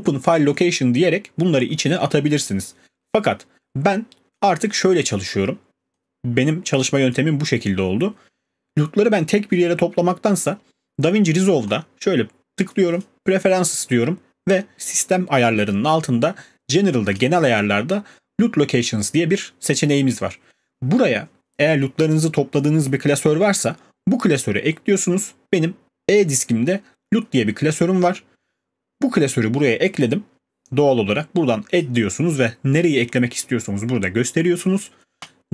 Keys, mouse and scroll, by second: 3.7 right drag, 4.4-5.6 drag, 7.1 click, 11.8-13.0 drag, 35.1 click.